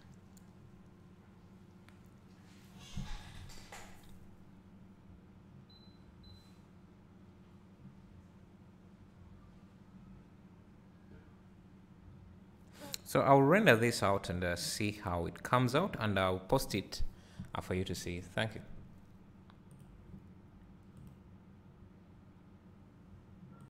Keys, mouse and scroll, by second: 23.1 typing.